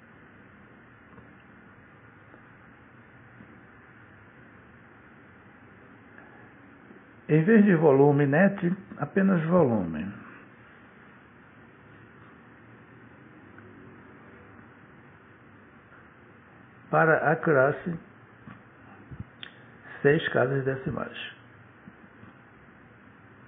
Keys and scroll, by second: 6.1 BackSpace, 8.1 Return.